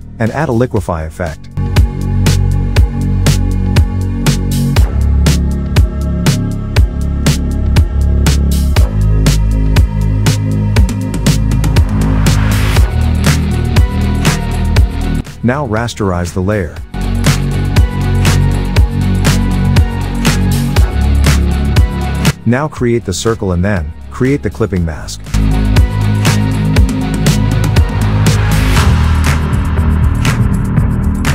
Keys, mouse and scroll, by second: 0.8 click, 1.8-2.3 ], 2.5 ], 2.6 ], 2.7 ], 3.3-4.0 drag, 6.9 click, 7.5 click, 8.0-8.5 click, 9.3 ctrl+z, 11.4 ctrl+shift+z, 13.5 click, 13.6 click, 15.1 right click, 16.0 click, 16.9 ctrl+t, 17.7-18.6 alt+click, 19.2-20.7 click.